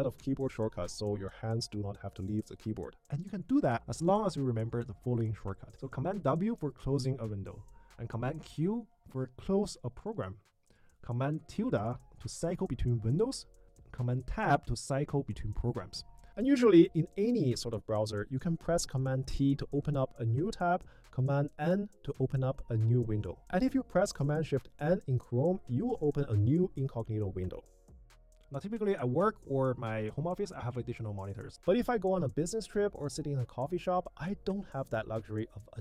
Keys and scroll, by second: 1.8 super+w, 6.3 super+w, 8.0 super+q, 10.5 super+`, 11.0 super+`, 11.6 super+`, 12.2 super+`, 12.8 super+`, 13.7 super+Tab, 15.4 super+Tab, 16.3 super+t, 21.2 super+n, 24.6 shift+super+n.